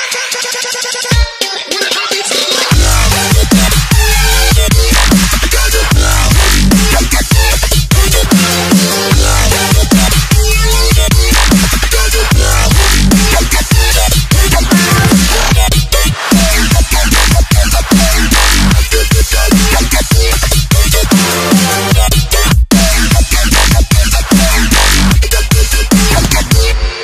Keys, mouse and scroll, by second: 2.6 click, 3.4 Delete, 3.6 click, 6.2 ctrl+s, 7.5 click, 9.5 Delete, 9.8 click, 11.5 Delete, 11.8 click, 14.6 Return, 15.1 click, 15.5 Delete, 15.8 ctrl+s, 18.8 click, 20.3 click, 20.9 ctrl+t, 21.2 alt+click, 22.1 Return, 22.3 s, 24.5 click.